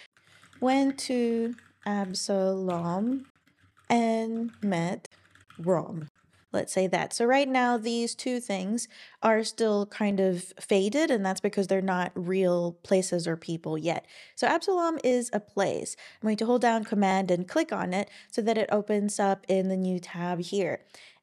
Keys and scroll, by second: 0.0-1.0 typing, 2.4-6.0 typing, 6.1 super+Right, 6.3 Escape, 7.6 typing.